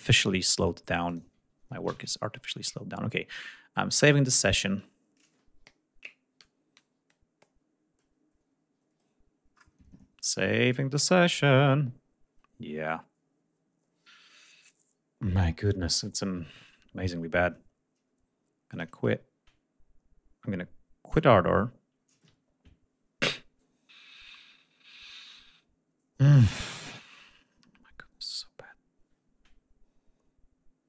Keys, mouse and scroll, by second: 0.9 click, 1.7 ctrl+s, 18.5 click, 20.9 click.